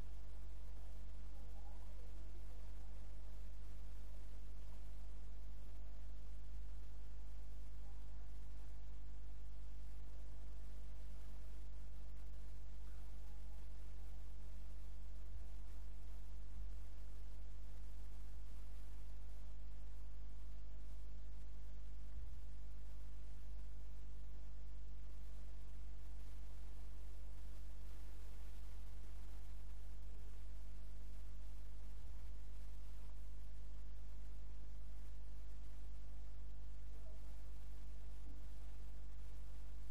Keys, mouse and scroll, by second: 0.2 click, 3.8 middle click, 5.5-7.4 right drag, 6.5 s, 8.6 middle click, 13.2 middle click, 15.4 g, 20.8-22.6 right drag, 22.3 g, 32.0 KP_0, 32.9 middle click, 33.1 middle click, 35.3 middle click.